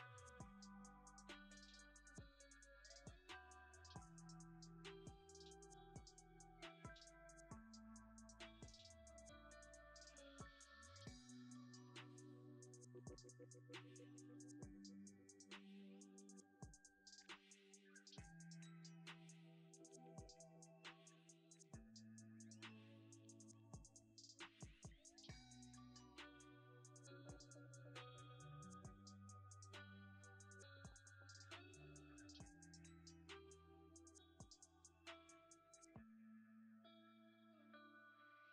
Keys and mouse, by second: 1.3-2.6 right drag, 5.2 right click, 7.4 right click, 9.2 click, 10.2 g, 10.6 click, 11.4 g, 11.7 click, 12.6 shift+right drag, 13.0 g, 14.0-14.9 drag, 15.7 g, 15.8 click, 16.9 shift+d, 17.9 click, 18.7 g, 19.2 click, 20.2 r, 20.5 click, 22.2 g, 23.4 shift+middle click, 26.1 h, 27.6 ctrl+z, 28.4 click, 28.6 g, 30.7-32.0 drag, 32.0 g, 32.1 click, 32.3 click, 34.3 click, 36.2 shift+click, 36.6 shift+d, 37.7 g, 37.9 click.